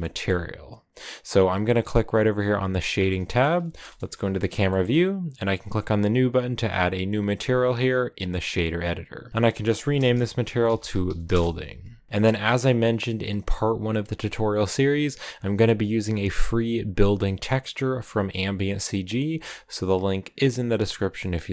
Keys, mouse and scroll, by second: 2.1 click, 2.8-3.2 scroll down 2, 3.2 middle click, 3.9 KP_0, 4.6-8.4 shift+middle drag, 8.4-12.1 drag, 12.1-14.1 middle drag, 14.1 click.